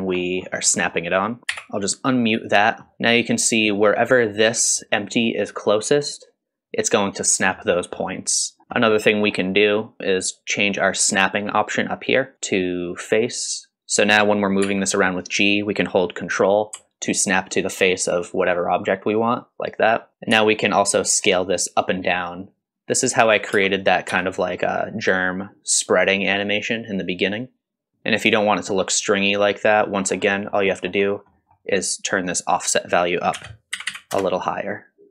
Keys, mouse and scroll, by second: 0.2 middle click, 0.5 scroll up 2, 0.8 middle click, 1.4 click, 1.5 m, 2.6-2.9 scroll up 2, 2.9 middle click, 3.4 click, 4.8 middle drag, 5.2-5.6 middle drag, 6.1-7.4 drag, 7.5-7.9 middle drag, 8.9 middle click, 12.3-13.9 drag, 14.6 g, 20.3 s, 23.5 space, 24.1 s, 29.5 middle click, 30.0-30.3 scroll up 2, 30.3 middle click, 30.7-31.3 scroll up 4, 31.3 middle click, 32.5-34.5 drag, 33.9 KP_9.